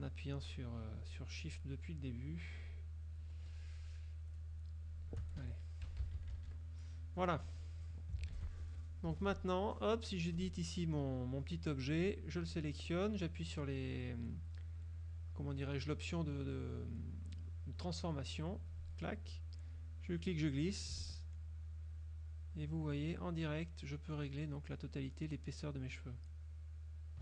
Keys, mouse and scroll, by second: 0.5 shift+click, 1.1 shift+click, 1.6 shift+click, 2.7 shift+click, 4.4 shift+click, 4.9 shift+click, 5.5 shift+F1, 5.9 shift+KP_Subtract, 7.5 click, 8.3 ctrl+s, 8.8 ctrl+F2, 9.5 ctrl+click, 10.5 click, 12.1 click, 18.6 click, 19.9-27.2 drag.